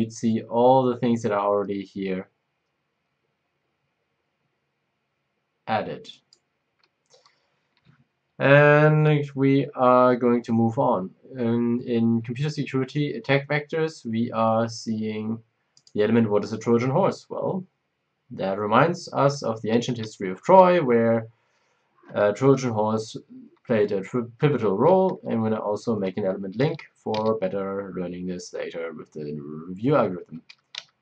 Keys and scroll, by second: 25.8 shift+F10, 27.1 c, 28.0 Down, 30.4 Down, 30.7 Down.